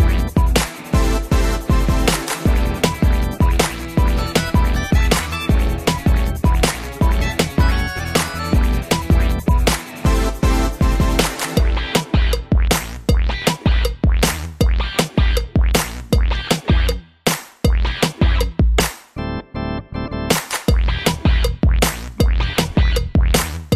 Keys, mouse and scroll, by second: 1.7 click, 1.8 click, 2.2 middle click, 2.7-3.3 scroll down 3, 4.8 click, 6.1 middle click, 6.9 h, 7.4 scroll up 1, 7.8 middle click, 8.0 middle click, 8.1 scroll up 1, 16.0 Escape, 19.0 click, 19.1 click, 20.4 click, 20.5 click, 23.0 click.